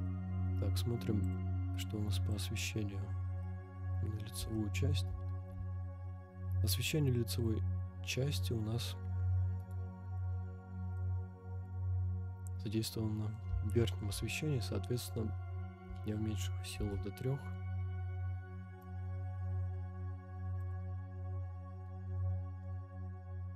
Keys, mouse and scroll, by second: 0.3-0.9 scroll down 2, 0.9 scroll down 1, 1.2 click, 2.3 click, 3.4-3.9 middle drag, 4.0 scroll up 2, 4.5-4.9 shift+middle drag, 5.4 g, 5.5 z, 9.6 right click, 10.1-11.0 middle drag, 11.2 scroll up 1, 11.7-13.3 middle drag, 13.7 shift+middle drag, 15.0-16.9 drag, 18.9 KP_0, 20.6 click, 21.6 scroll down 1, 22.5 g, 22.7 y.